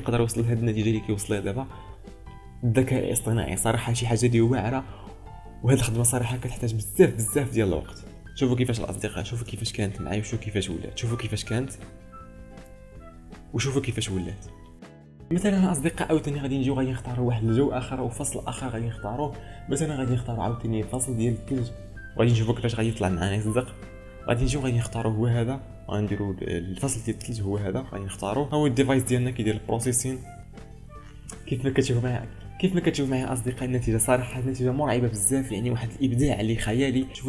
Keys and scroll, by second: 9.5 ctrl+space, 37.1 ctrl+space.